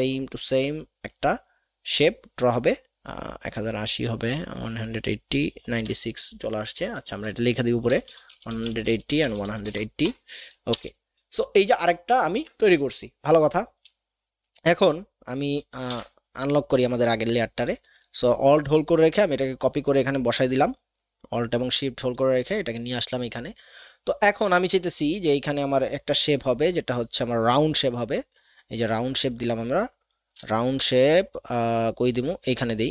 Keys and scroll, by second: 7.1 ctrl+a, 7.9-9.2 typing, 8.7 Tab, 15.9 ctrl+alt+KP_2, 29.2 alt+shift+space, 30.8 alt+shift+space.